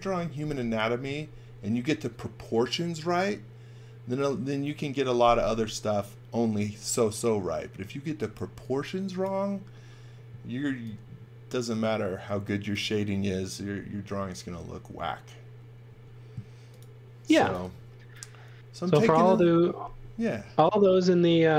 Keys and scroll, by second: 8.0 x, 8.3 v, 10.6 v, 15.9 space, 17.3 v, 21.2 space.